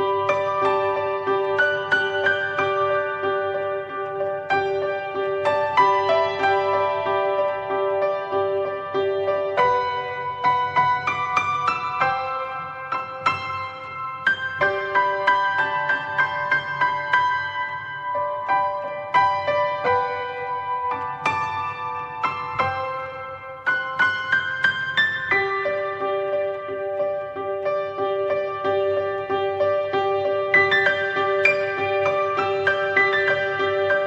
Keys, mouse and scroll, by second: 0.0 click, 1.3 click, 3.7 ctrl+z, 3.9 click, 5.1 click, 5.6-6.0 alt+middle drag, 7.0 click, 14.4 click, 15.4 s, 17.5 click, 19.2 s, 20.6 click, 22.4 r, 23.9 click, 25.5 s, 27.4 click.